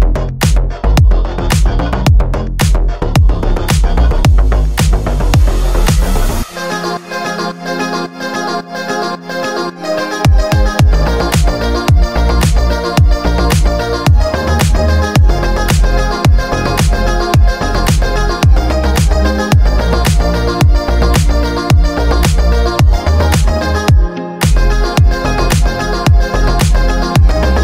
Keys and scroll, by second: 8.8 F3.